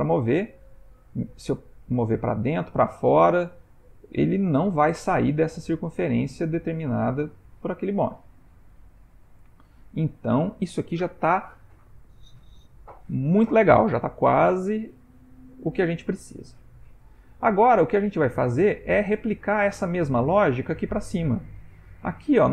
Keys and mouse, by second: 9.5 ctrl+middle click, 10.2 shift+middle click, 10.5 shift+middle click, 15.9 g.